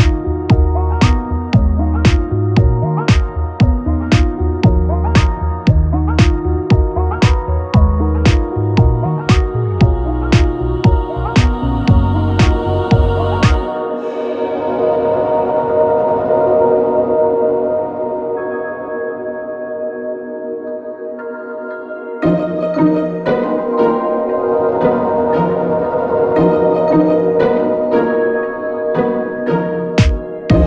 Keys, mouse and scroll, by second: 0.1 m, 1.5 click, 1.5-5.1 middle drag, 4.4 Tab, 5.1 click, 5.2-7.4 middle drag, 7.4 click, 7.5 middle click, 7.8 click, 8.3 Tab, 8.3-10.0 middle drag, 8.8 Tab, 9.1 alt+x, 10.0 click, 10.1-11.8 middle drag, 10.9 alt+x, 11.8 click, 11.8-13.3 middle drag, 13.3-21.1 drag, 14.4 alt+v, 15.3 Tab, 16.6 q, 17.2 a, 17.8 m, 21.1-24.0 middle drag, 21.2 Tab, 23.3 Tab, 23.7 3, 24.0 click, 24.8-30.6 ctrl+middle drag, 24.9 ctrl+b, 27.3 click, 27.9 e, 28.3 s, 29.0 alt+s, 30.3 e.